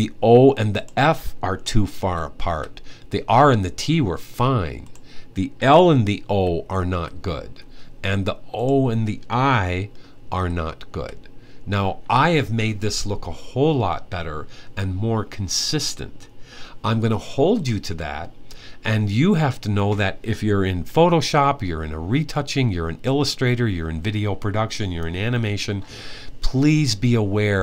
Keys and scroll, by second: 1.8-2.2 typing, 6.1 alt+Left, 6.7 Left, 7.7 typing, 10.1-10.7 typing.